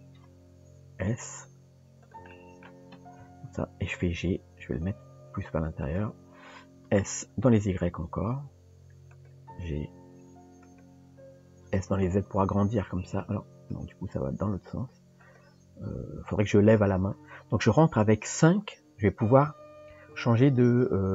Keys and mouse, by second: 2.3 middle click, 3.2 KP_3, 4.2 g, 6.9 s, 9.7 g, 11.6 s, 19.5 KP_5, 20.1 KP_5.